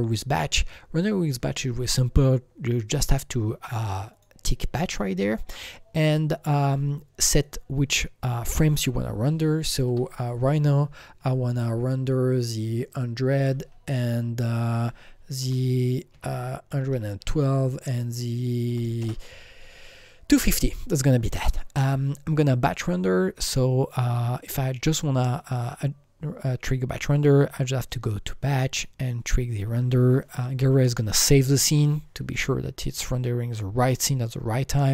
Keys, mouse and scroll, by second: 4.1 click, 7.2 click, 7.4 double click, 7.8 double click, 9.8 BackSpace, 11.2 KP_1, 12.6 KP_0, 13.3 KP_0, 15.4-17.2 typing, 18.7 KP_2, 18.8 KP_5, 19.0 KP_0, 19.0 KP_2, 20.7 click, 28.7 click, 28.7 KP_0, 28.7 KP_5, 28.7 click.